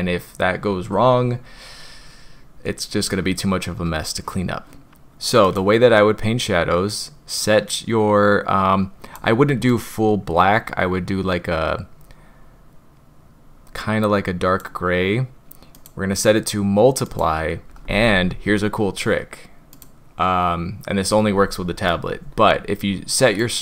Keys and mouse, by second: 5.4 click, 16.2-17.3 drag, 19.7 click, 23.3-23.6 drag.